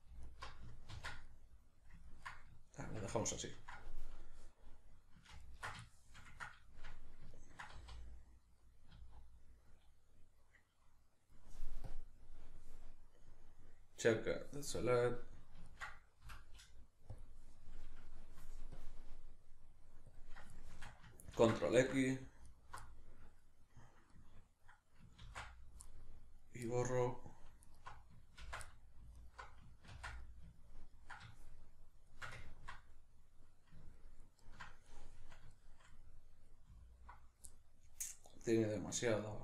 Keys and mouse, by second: 0.3 alt+right click, 0.9 ctrl+x, 1.3-5.4 middle drag, 5.4 ctrl+alt+right click, 5.8-11.8 shift+middle drag, 7.8 z, 11.8-15.1 drag, 15.1-18.8 middle drag, 16.3 F9, 18.8-20.6 drag, 20.6-22.5 shift+middle drag, 21.4 ctrl+x, 22.5 alt+right click, 22.8-27.7 middle drag, 25.3 ctrl+x, 27.7 alt+right click, 28.5 ctrl+x, 28.7 middle click, 29.2 alt+right click, 29.9 ctrl+x, 30.3-39.4 middle drag.